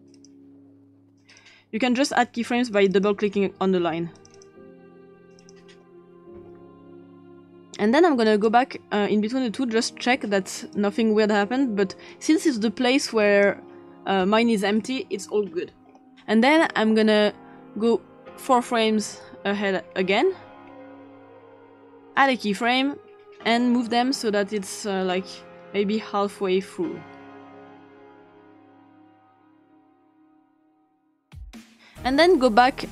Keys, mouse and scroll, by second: 0.0 click, 2.7 click, 2.9 click, 4.2 click, 4.4 click, 4.5 click, 5.4 click, 8.3 click, 10.8 click, 17.8-18.9 scroll down 2, 18.9 scroll down 1, 20.6-21.1 scroll down 2, 21.1-22.2 scroll down 2, 22.7 click, 24.6-26.6 drag, 27.7 click, 28.6 click, 29.2 click, 29.9 click, 30.5 click, 31.1 click, 31.6 click.